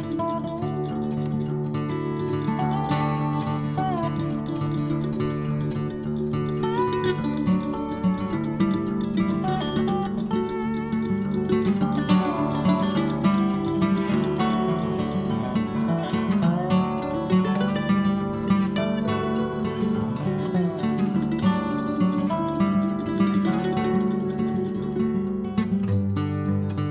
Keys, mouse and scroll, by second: 0.3-1.8 drag, 2.2-3.7 drag, 3.8-5.3 drag, 6.0-7.2 drag, 7.2-8.7 right drag, 8.9 click, 9.8 n, 11.4 click, 12.2 click, 14.5 n, 15.1-15.7 scroll down 1, 15.7-24.4 drag, 24.4 middle click, 25.2-26.5 drag, 26.5-26.9 scroll down 2.